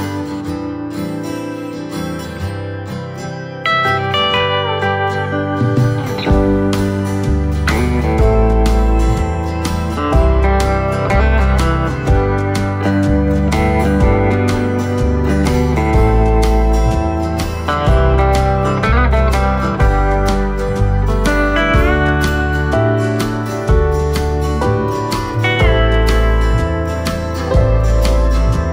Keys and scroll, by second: 1.9 alt+shift+v, 11.0 ctrl+c, 12.7 v, 21.6 ctrl+c, 22.4 ctrl+shift+v.